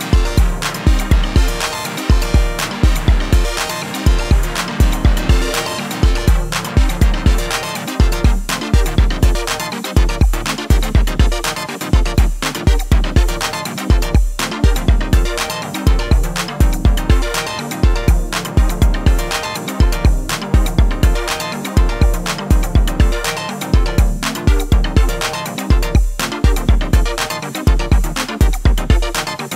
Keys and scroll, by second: 18.1 3, 23.0 e, 23.9 y.